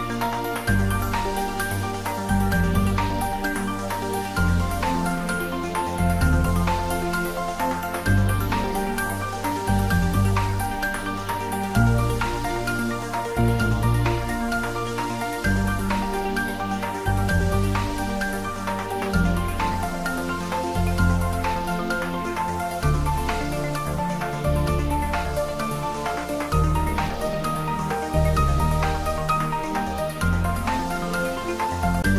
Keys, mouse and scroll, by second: 0.9-6.2 middle drag, 7.5 middle click, 7.6 click, 14.7 click, 22.6 click, 22.7 click, 25.9 click, 29.1 click.